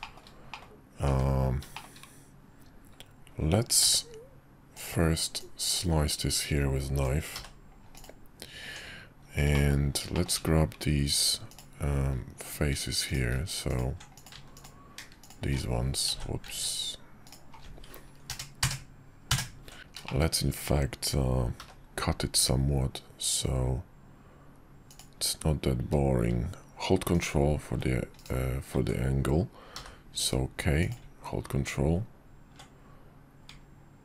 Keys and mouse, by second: 0.0 middle click, 0.5 middle click, 1.1 `, 1.7 shift+middle click, 3.8 d, 5.4-8.1 drag, 8.6 Tab, 9.5 middle click, 10.1 shift+middle click, 11.5 alt+click, 15.2 alt+shift+click, 16.1 ctrl+z, 17.2 alt+shift+click, 18.3 ctrl+KP_Add, 19.8 Tab, 19.8 x, 20.0 shift+click, 21.6 k, 29.7 k.